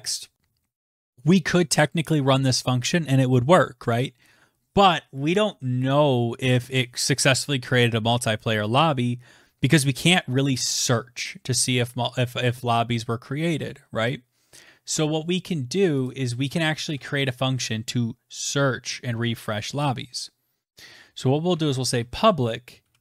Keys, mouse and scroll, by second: 14.0 click, 14.7 Return, 14.9 Return, 19.3-21.7 typing.